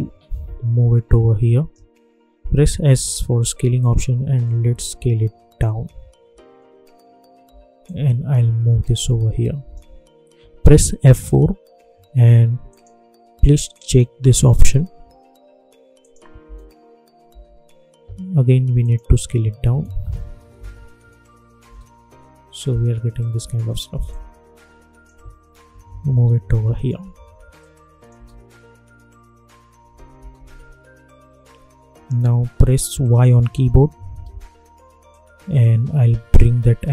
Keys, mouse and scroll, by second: 2.5 s, 3.4-6.5 drag, 6.5-7.0 alt+scroll up 1, 7.2 alt+scroll down 1, 7.8-11.0 drag, 11.0 F4, 12.6 click, 15.9 click, 16.4 space, 18.8 click, 20.5 Return, 21.6 space, 24.0-25.6 drag, 25.6 Down, 27.5 click, 28.1 space, 30.1 space, 33.4 y, 35.0-36.9 drag.